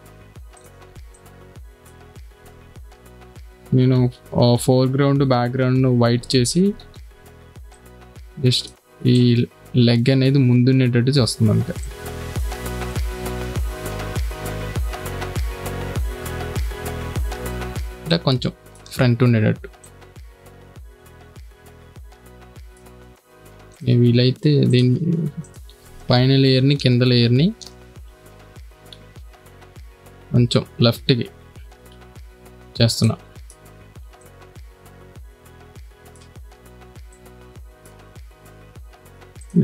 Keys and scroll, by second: 1.3 space, 2.2 b, 3.2 x, 5.9 [, 13.2 space, 27.2 shift+Left, 28.9 v, 29.1 Left, 32.9 space.